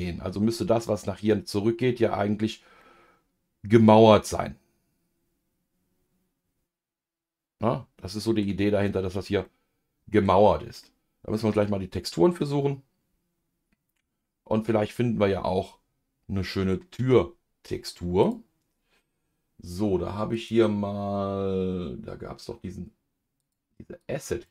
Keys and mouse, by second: 2.8-10.3 middle drag, 10.8-17.2 middle drag.